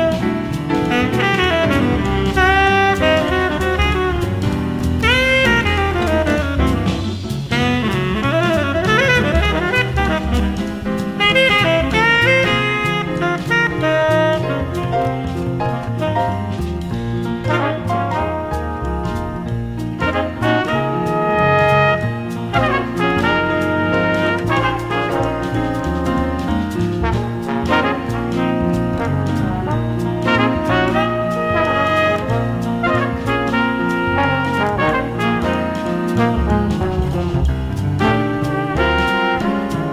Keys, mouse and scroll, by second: 0.5-1.0 scroll down 1, 1.0-8.9 middle drag, 10.6 a, 13.2 b, 15.7 a, 16.5 b, 20.4 space, 22.8-28.4 middle drag, 28.4 a, 29.3 a, 29.7 middle click, 32.7-34.6 drag, 36.6 space.